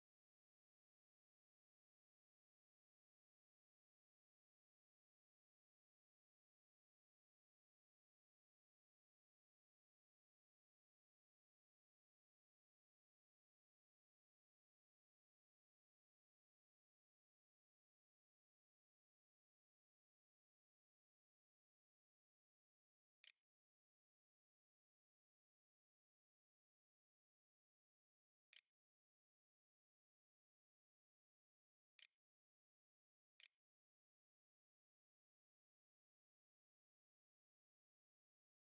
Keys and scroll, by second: 21.4-24.2 typing, 26.4-35.1 typing.